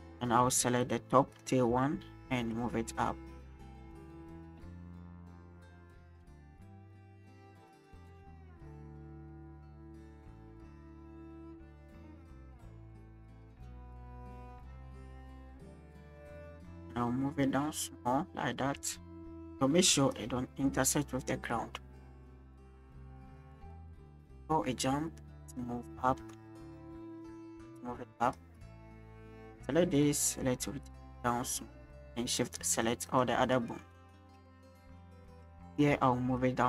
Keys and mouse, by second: 0.8 click, 1.3 click, 2.5 click, 5.2 click, 5.8 click, 6.1 click, 7.0 shift+click, 8.6 shift+click, 13.1-13.7 shift+drag, 14.6-16.2 drag, 17.0 click, 20.1 shift+middle drag, 22.1 middle click, 22.8-25.6 drag, 26.1 shift+middle click, 26.8 click, 29.4 click, 30.0 click, 31.9 shift+click, 32.4 shift+click, 32.7 shift+click, 34.2-35.5 drag, 36.4 click.